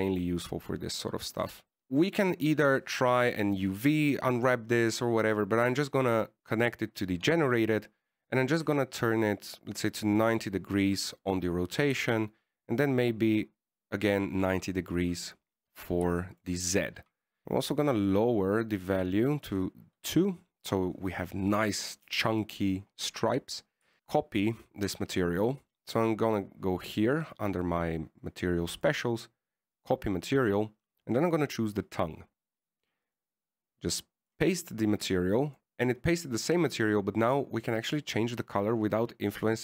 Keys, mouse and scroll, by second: 1.8 middle click, 2.9 KP_1, 4.4 scroll up 5, 6.4 click, 13.1 click, 17.4 shift+middle click, 18.0 click, 18.5 click, 21.2-21.6 scroll down 1, 24.7 click, 30.0 click, 32.4 right click, 34.3 click, 38.5 click.